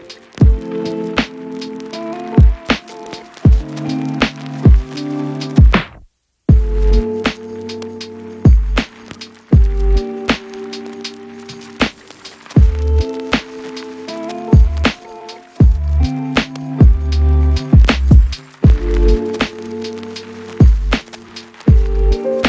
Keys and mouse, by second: 0.5 shift+d, 0.9 Tab, 1.1 Tab, 1.7 Tab, 2.2 x, 2.6 shift+Tab, 3.0 f, 3.2 Tab, 3.2 ctrl+x, 3.4 ctrl+alt+middle click, 3.5 ctrl+x, 3.8 Tab, 4.5 middle click, 6.7 s, 7.1 a, 7.1 s, 7.5 Tab, 8.7 ctrl+z, 9.3 ctrl+z, 9.5 ctrl+z, 10.2 a, 10.2 s, 10.8 Tab, 11.3 middle click, 12.5-13.7 middle drag, 13.7 shift+d, 13.8 shift+middle click, 14.0 KP_Divide, 14.1 shift+middle click, 14.5 shift+middle click, 15.5 ctrl+KP_Subtract, 16.0 s, 17.7 s, 18.4 Tab, 18.5 shift+click, 19.0 Tab, 19.2-20.8 typing, 19.7 Tab, 19.8 click, 20.0 shift+click, 20.7 Tab, 21.0 shift+click, 22.2 u.